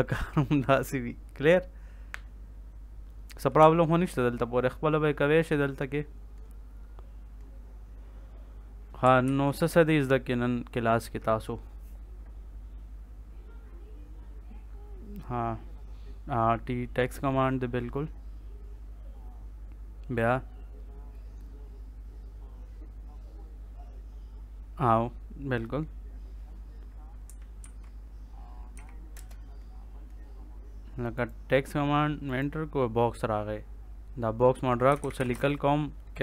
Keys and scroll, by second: 9.2 ctrl+s, 27.6 ctrl+s, 28.7 t, 29.1 space, 34.6-35.9 typing.